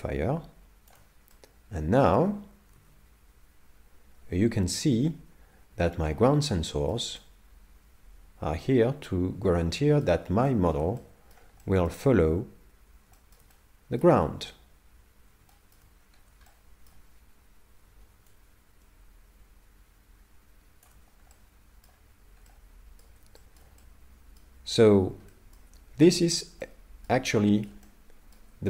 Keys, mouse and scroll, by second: 1.3 middle click, 2.8 alt+a, 4.3 middle click, 10.5 shift+middle click, 11.0 middle click, 11.6 shift+middle click, 13.5 middle click, 15.5 shift+middle click, 16.0 scroll down 4, 16.2 scroll up 1, 16.5 shift+middle click, 18.3 shift+click, 21.3 middle click, 23.4 shift+middle click, 23.8 middle click, 25.3 shift+middle click, 26.2 middle click, 26.6 middle click, 27.3 shift+middle click, 27.9 middle click.